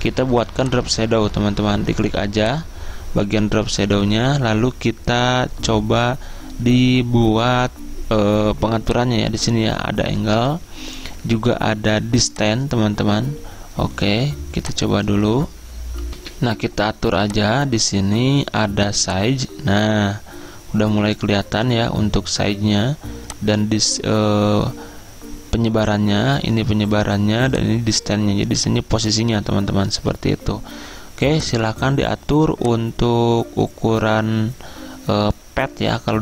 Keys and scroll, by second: 17.3 F10.